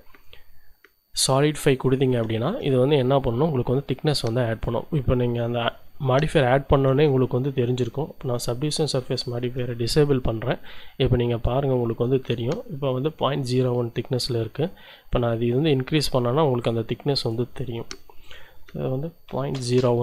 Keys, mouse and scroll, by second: 1.3 click, 2.4-3.5 drag, 3.5-4.0 scroll up 1, 7.3 shift+click, 10.6 click, 13.7-19.3 drag, 19.3 ., 19.5 0, 19.8 1.